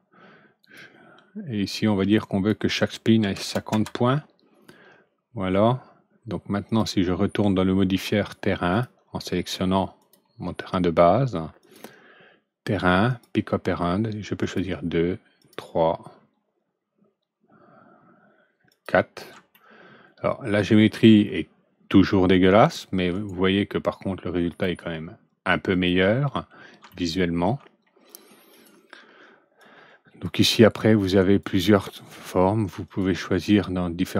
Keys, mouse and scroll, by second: 0.5 click, 2.0 click, 3.1 KP_5, 3.3 KP_0, 3.6 KP_Enter, 6.6 click, 8.6 click, 9.9 click, 11.5 click, 13.0 click, 14.3 click, 15.3 click, 18.6 click, 19.4-21.1 alt+middle drag, 23.1 right click, 24.4 click, 25.6 click, 26.8 alt+middle click, 28.4 alt+click, 29.5-30.1 drag, 30.7 click, 32.8 click.